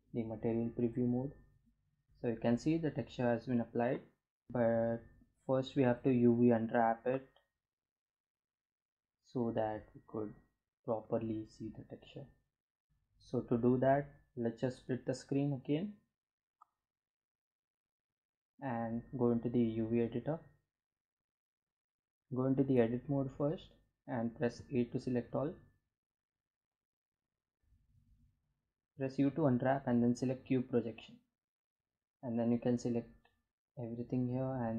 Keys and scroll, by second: 22.0 Tab, 23.4 a, 27.7 u, 30.5 a, 33.4 s.